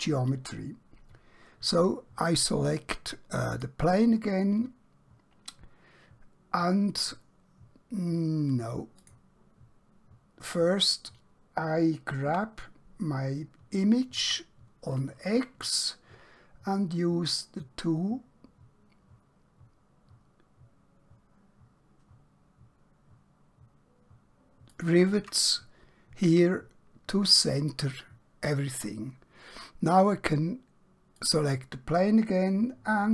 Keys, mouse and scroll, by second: 3.5 click, 9.0 click, 12.3 g, 14.2 typing, 24.8 shift+click, 31.2 click.